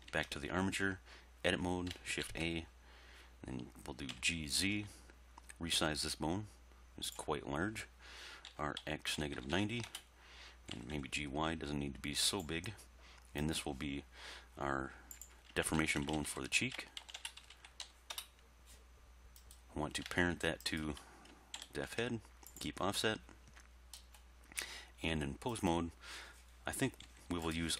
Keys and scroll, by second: 0.1 Tab, 2.2 shift+a, 4.2 g, 4.6 z, 8.5-9.5 typing, 9.9 Return, 10.8 g, 11.0 y, 15.8-17.8 typing, 18.2 Return, 21.6 ctrl+p, 25.2 Tab, 27.1 g.